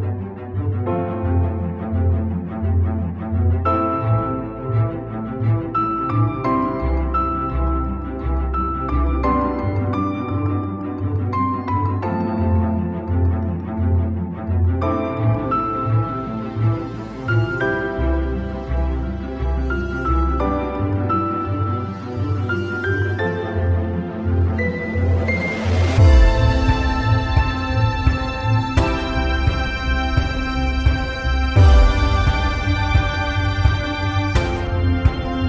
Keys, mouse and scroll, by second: 0.4 alt+right click, 0.9 alt+right click, 2.5 alt+right click, 3.0 alt+right click, 3.2 alt+right click, 3.6 alt+right click, 3.8 alt+right click, 4.5 alt+right click, 5.2 alt+right click, 7.9 alt+right click, 8.2 alt+right click, 10.5 alt+right click, 11.3 alt+right click, 11.8 alt+right click, 13.0 alt+right click, 22.1 alt+right click, 25.1 alt+right click, 27.3 alt+right click, 34.6 alt+right click, 35.3 alt+right click.